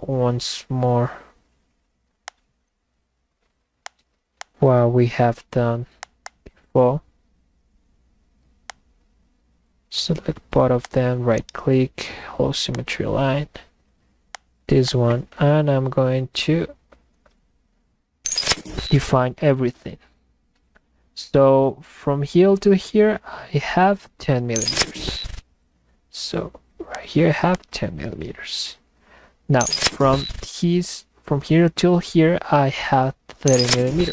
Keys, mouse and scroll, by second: 2.2 click, 3.8 click, 4.4 click, 6.0 click, 6.2 click, 8.7 click, 10.8 click, 12.8 click, 14.4 click, 14.9 click, 27.0 click, 27.5 click.